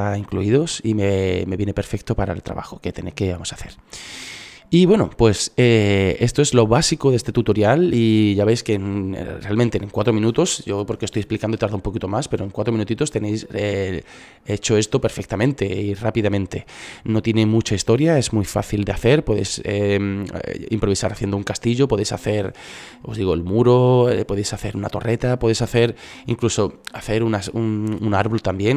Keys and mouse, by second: 13.0-14.6 middle drag.